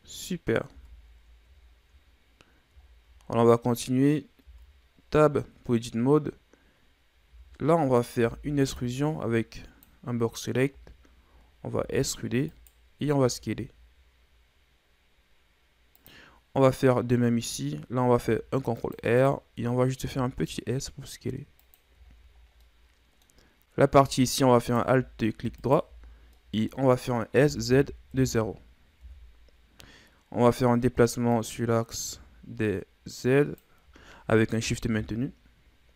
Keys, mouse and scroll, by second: 0.7 Tab, 1.1-2.1 scroll down 8, 2.1-2.8 scroll up 3, 2.8-3.2 scroll down 4, 3.2-3.9 scroll up 2, 4.1-4.5 scroll up 1, 4.5 Tab, 7.3 z, 7.9 right click, 8.2 b, 10.7 z, 11.7 e, 13.2 s, 18.2 ctrl+r, 20.1 s, 22.1 scroll down 4, 22.6 middle click, 23.3-24.6 scroll up 3, 24.6 alt+right click, 25.6 alt+right click, 26.1-26.4 scroll down 3, 26.4-27.4 middle drag, 27.4 s, 30.4 scroll up 2, 31.4-34.4 drag, 35.0 KP_1.